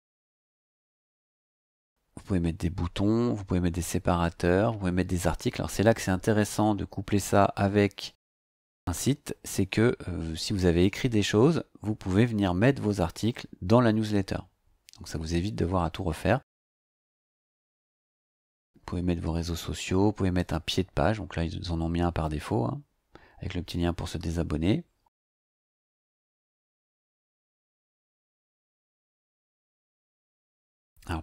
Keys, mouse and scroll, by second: 0.4 click, 7.1 scroll down 2, 9.3 scroll down 2, 14.4-15.1 scroll down 2, 15.1 scroll up 2, 20.6-21.3 scroll down 4, 28.2-28.7 scroll up 2, 29.3 scroll up 2, 30.4 scroll up 2.